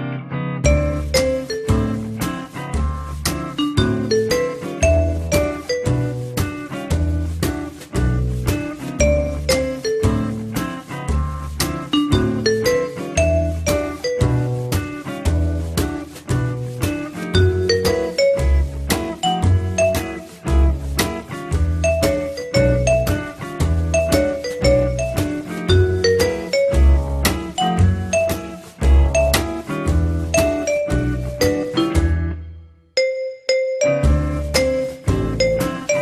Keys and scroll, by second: 3.8-4.7 typing, 4.9 Return, 16.6 F3, 18.2 m, 26.0-27.0 typing.